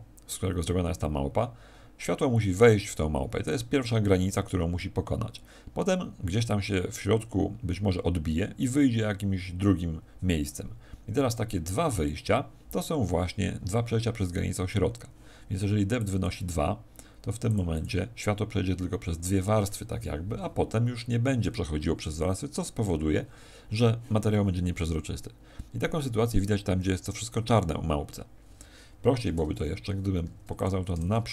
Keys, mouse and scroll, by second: 28.9 Escape, 29.7-30.1 scroll down 4, 30.1 x, 30.9 shift+a.